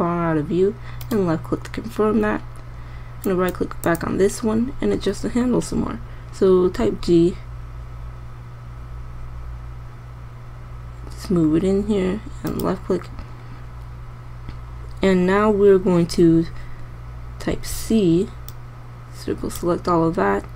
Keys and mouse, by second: 7.3 g, 18.0 c.